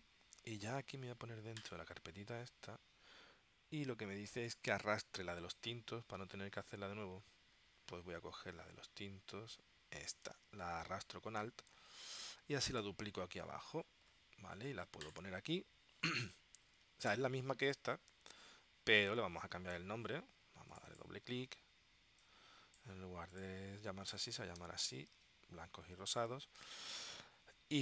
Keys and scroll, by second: 24.2 BackSpace, 24.9 y, 25.3 shift+r.